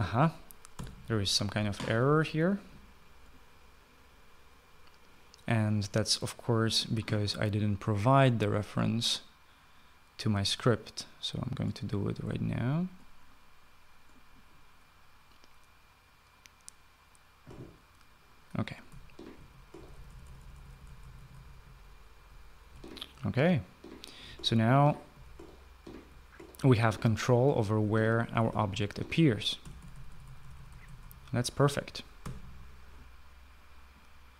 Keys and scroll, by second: 1.2 Escape, 7.2 typing, 19.1-32.0 typing, 32.7 Escape.